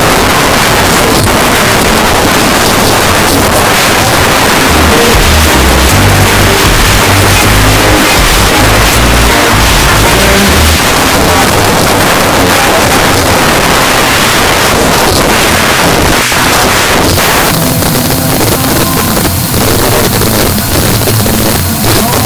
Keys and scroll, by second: 10.8 Page_Down.